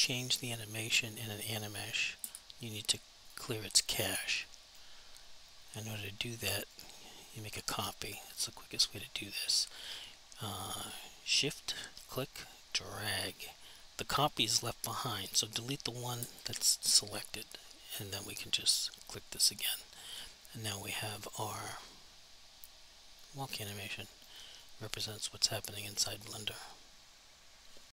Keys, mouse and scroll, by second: 2.2 Delete, 3.3 click, 4.6 click, 5.8 click, 6.4 click, 7.7 alt+click, 8.2 alt+click, 12.1 shift+click, 15.3 alt+click, 16.2 Delete, 18.1 click, 20.3 alt+click, 21.6 alt+click, 21.9 alt+click, 23.7 alt+click, 24.2 alt+click, 24.5 alt+click, 25.0 alt+double click, 25.3 alt+click, 25.8 alt+click.